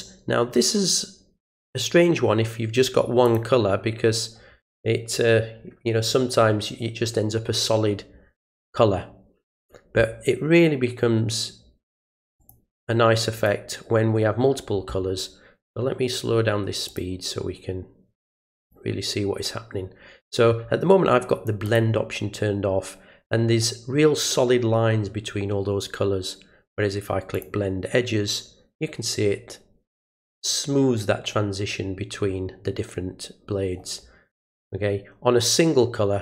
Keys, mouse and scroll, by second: 3.2 click, 12.4 click, 13.3 click, 16.8 click, 18.2 click, 21.6 click, 27.3 click.